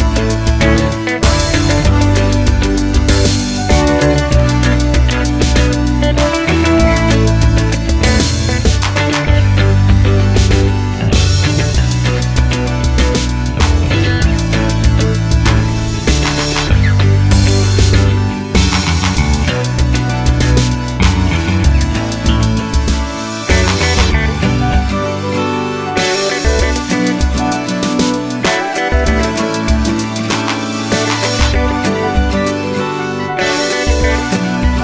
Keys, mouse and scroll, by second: 3.5 click, 3.6-4.9 middle drag, 4.9 click, 5.2 middle click, 5.3-7.0 typing, 5.8 middle click, 5.8 click, 6.1 middle click, 6.7 click, 7.1 middle click, 7.5 click, 7.8 shift+click, 7.9-10.7 middle drag, 8.6 f, 10.7 click, 11.2-15.3 middle drag, 12.3 ctrl+r, 13.7 g, 15.3 click, 15.6-18.3 middle drag, 18.3 alt+click, 19.1 g, 19.8 middle click, 20.1 shift+click, 20.3 middle click, 20.5 shift+click, 20.6 middle click, 20.9 g, 21.9 click, 21.9 middle click, 23.3 click, 23.7 middle click, 24.3-27.0 typing, 24.5 click, 24.8 middle click, 25.3 click, 25.6 middle click, 25.9 click, 26.2 middle click, 26.5 click, 26.8 middle click, 27.4 alt+click, 28.1 ctrl+click, 28.3 middle click, 28.6 ctrl+click, 29.0 alt+shift+click, 29.4 KP_3, 30.1 z, 30.2-30.9 scroll up 1, 30.9 g, 32.1-34.8 middle drag, 32.7-33.0 scroll down 1, 33.1 Tab, 33.5 scroll down 2.